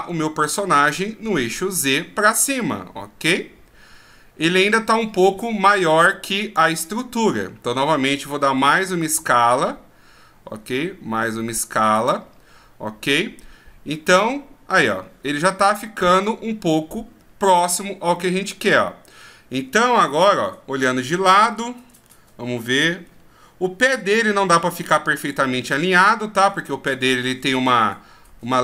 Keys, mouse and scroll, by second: 1.7 click, 15.3 scroll up 1, 16.2-16.9 scroll up 3, 16.9-17.5 scroll down 3, 17.5-19.4 scroll up 1, 20.2 KP_3, 21.6-22.1 shift+scroll down 4, 22.0-23.1 scroll up 4, 23.4 scroll down 2, 24.0-24.5 shift+scroll down 2, 24.4 scroll up 1, 25.1 scroll up 4, 25.9-26.5 scroll up 6, 27.3-28.4 ctrl+scroll down 14, 28.4-28.6 ctrl+scroll down 2.